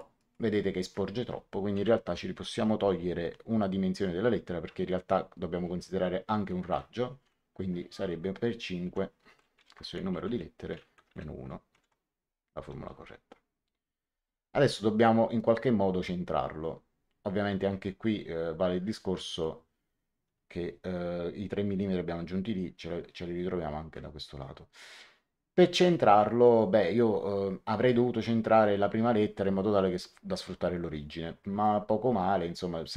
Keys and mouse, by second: 1.7 End, 8.8 Left, 9.5 shift+8, 10.2 End, 10.9 KP_Subtract, 11.6 shift+9, 12.9 Return, 12.9 KP_Enter, 15.3 click, 25.7 click, 31.5 click.